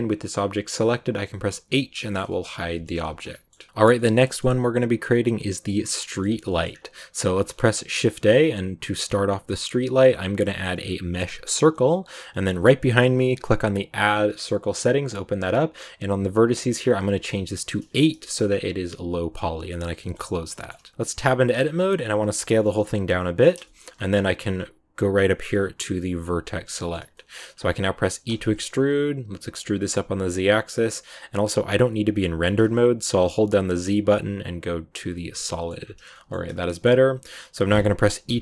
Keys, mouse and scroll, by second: 1.6 h, 2.0 shift+middle click, 3.0 ctrl+s, 3.2-8.0 middle drag, 8.0 shift+a, 14.3-17.8 drag, 18.8 click, 19.6 shift+middle click, 20.1 scroll up 2, 20.4 shift+middle click, 21.0 Tab, 21.3 scroll down 2, 21.5 shift+middle click, 21.8 scroll up 1, 22.1 s, 23.5 shift+middle click, 23.7 scroll up 2, 26.0 click, 26.6 shift+middle click, 26.9 scroll down 1, 27.0 middle click, 27.5-28.2 scroll down 1, 28.2 e, 35.4 shift+middle click, 35.7-36.0 scroll down 2, 36.0 shift+middle click, 36.4 scroll up 1, 36.6-38.2 middle drag, 38.2 e.